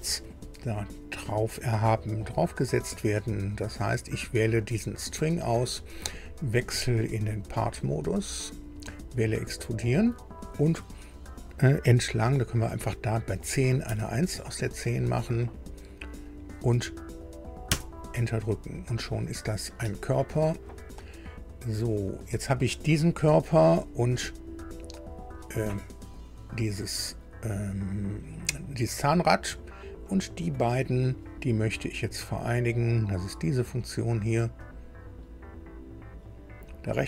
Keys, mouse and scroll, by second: 3.4 scroll down 2, 4.6 click, 6.6 click, 7.9 click, 9.5 click, 13.8 KP_1, 17.6 KP_Enter, 21.4 click, 25.3 click, 30.0 ctrl+click, 34.6 click.